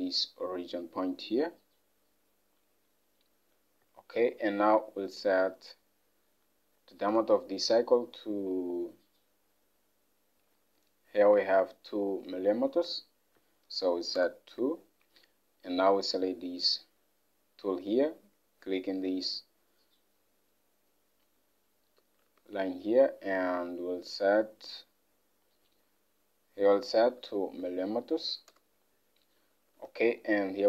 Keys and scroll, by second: 7.4 alt+Tab, 13.9 2, 14.3 Return, 22.3 alt+Tab, 28.3 typing, 28.6 Return, 29.8 alt+Tab.